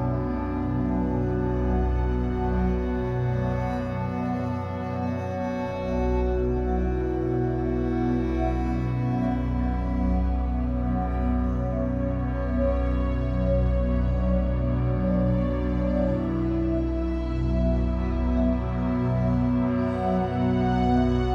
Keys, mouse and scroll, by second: 0.0 shift+scroll down 1, 0.1-0.8 shift+middle drag, 0.8 click, 1.0 Tab, 1.2 3, 1.3 click, 1.5-2.0 scroll up 2, 2.0 shift+click, 2.4 e, 2.6 s, 3.5 ctrl+z, 5.6 e, 6.3 s, 7.8 Tab, 7.9 scroll down 4, 8.2 middle click, 8.8 scroll up 2, 9.1 middle click, 9.3 e, 10.4 Tab, 10.6-12.3 middle drag, 12.3 Tab, 13.4 Tab, 14.6-15.7 middle drag, 15.7-16.1 scroll down 1, 16.1-17.1 shift+middle drag, 17.1 scroll down 1, 17.3-19.3 shift+middle drag, 19.3-19.6 scroll down 2, 19.6-20.9 middle drag, 20.9-21.3 scroll up 2.